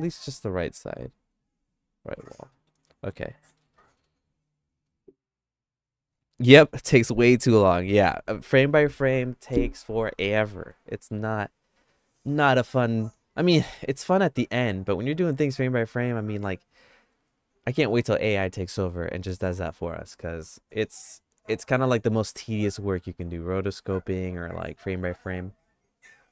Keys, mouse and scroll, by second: 2.5 middle click, 3.0 shift+middle click, 3.9 ctrl+s, 13.6 middle click.